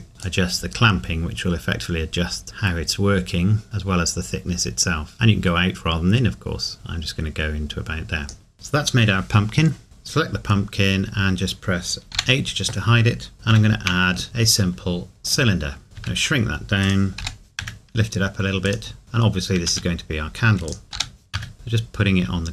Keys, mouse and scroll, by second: 8.5 ctrl+s, 12.1 h, 15.3 click, 15.8 scroll down 1, 16.0 s, 16.8 click, 17.2 g, 18.6 click, 19.0-19.6 scroll up 1, 19.6 s, 20.7 click, 20.9 g.